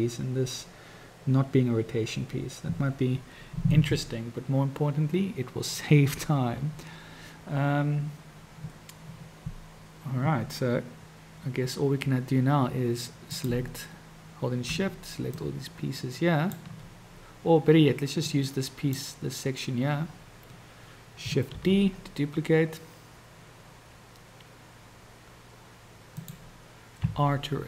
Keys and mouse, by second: 13.3 click, 15.4-16.7 shift+drag, 18.5 click, 21.8 shift+d, 27.1 r.